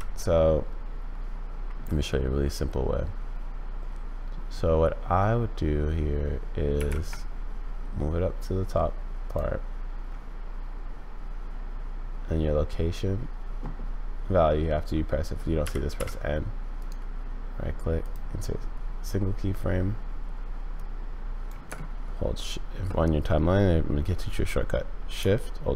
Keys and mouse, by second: 6.7 g, 15.6 n, 15.9 n, 16.8-18.1 drag, 20.7 drag.